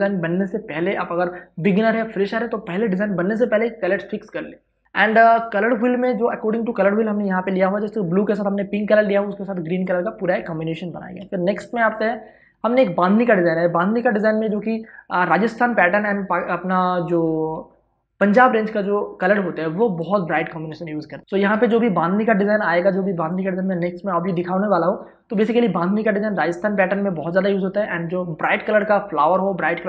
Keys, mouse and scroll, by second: 4.8 ctrl+click, 5.1 ctrl+space, 5.5 ctrl+click, 5.9 ctrl+space, 6.0 click, 11.5 ctrl+shift+Tab, 21.8 space, 22.0 ctrl+click.